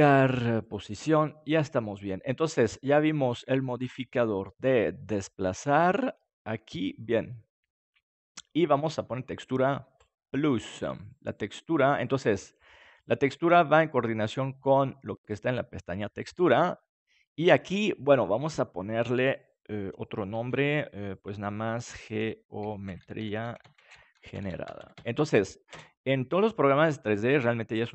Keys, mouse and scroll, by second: 3.2-5.8 drag, 10.0-14.2 drag, 15.3-17.0 drag, 18.3-24.8 drag.